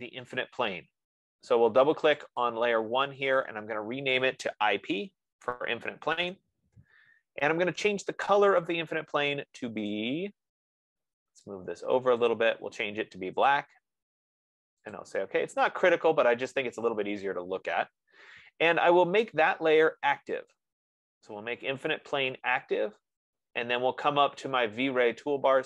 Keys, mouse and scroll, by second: 0.0 click, 2.8 click, 4.6 click, 5.4 p, 6.7 Return, 9.2 click, 10.2 click, 12.9 click, 21.0 click.